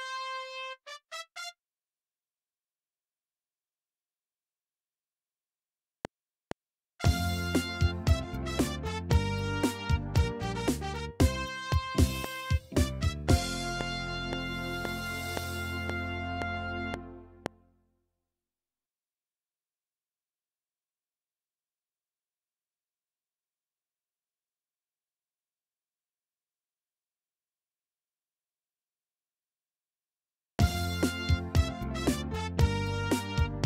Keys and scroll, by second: 1.8 F7, 17.5 space, 30.5 space, 32.5 ctrl+Right.